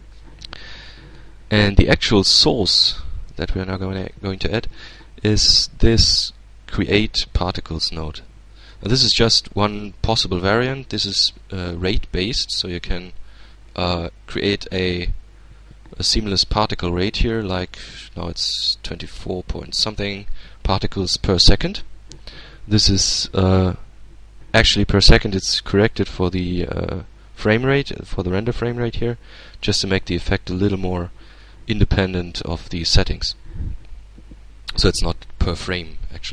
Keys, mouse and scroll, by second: 1.7 shift+a, 6.7 click, 7.7-10.4 drag, 11.6-17.3 drag, 25.6 click, 28.0 click, 31.2-32.4 middle drag.